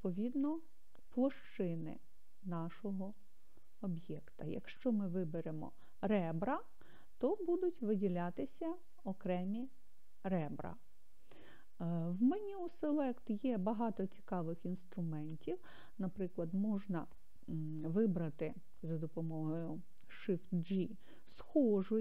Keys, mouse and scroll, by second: 1.4 click, 3.1 click, 5.5 click, 7.6 click, 8.5 click, 9.4 click, 10.6 click, 11.4 click, 12.9-15.1 drag.